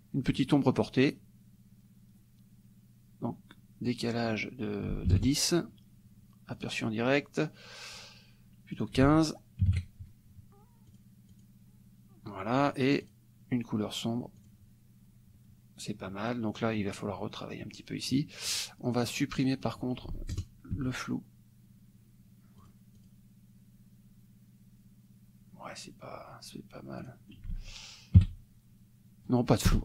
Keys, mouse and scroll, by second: 4.1 click, 5.1 ctrl+KP_1, 5.2 ctrl+KP_0, 6.6 click, 8.8 ctrl+click, 9.1 ctrl+a, 9.7 KP_1, 9.7 KP_5, 10.9 click, 11.5 click, 13.1 click, 14.5 click, 18.5 click, 19.5 click, 20.1 ctrl+a, 22.6-26.1 drag, 27.0 click, 27.6 ctrl+a, 28.2 KP_1, 29.7 BackSpace.